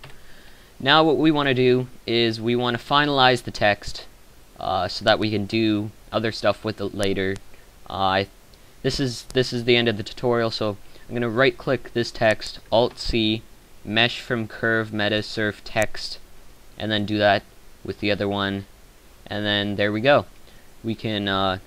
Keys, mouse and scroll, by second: 12.8 alt+c, 17.2 alt+c.